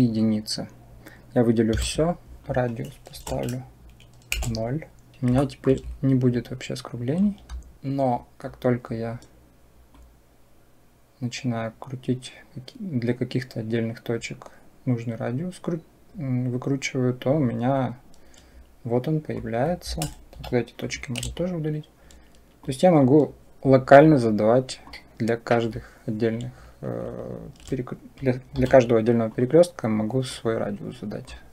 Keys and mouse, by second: 1.6 a, 2.4-4.2 drag, 5.3 shift+middle click, 7.0 click, 7.7 Delete, 8.1 click, 9.8-17.1 drag, 19.2 click, 20.2 Delete, 22.6 click, 24.7-25.7 drag, 28.4 Delete, 30.3 click.